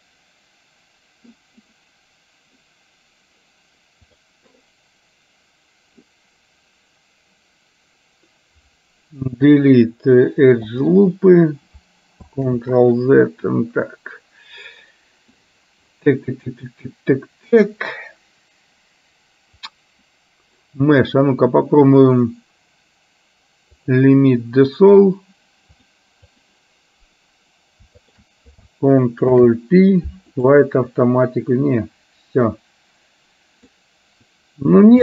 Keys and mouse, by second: 4.3-11.1 drag, 12.6 ctrl+z, 19.8-24.1 drag, 25.8 click, 29.5 ctrl+p, 32.5-33.7 middle drag.